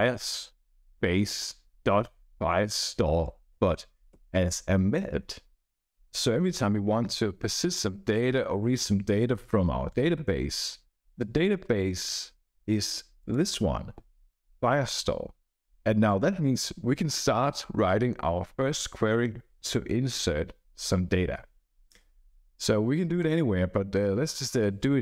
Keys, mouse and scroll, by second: 0.0-4.1 typing, 13.1 click, 23.1 click, 24.2 click.